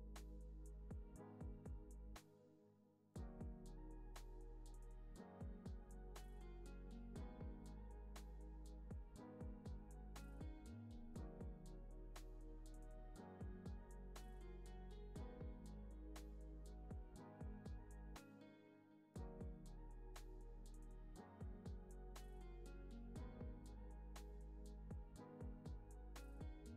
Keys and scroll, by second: 4.4 alt+z, 5.1 alt+w, 12.0 alt+x, 12.5 alt+z, 13.7 alt+z, 14.5 alt+x, 16.4 alt+x, 18.9 alt+w, 26.1 alt+z.